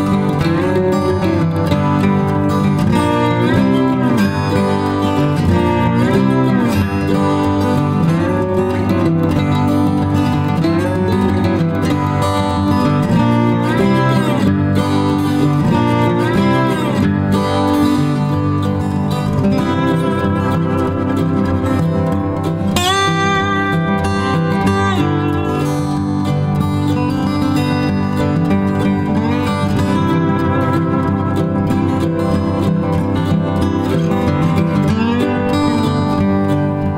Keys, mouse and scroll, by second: 0.9 ctrl+alt+click, 1.1 alt+shift+click, 2.0 space, 2.4 alt+click, 2.6 alt+shift+click, 2.9 shift+click, 6.5 shift+click, 8.6 space, 21.3 space.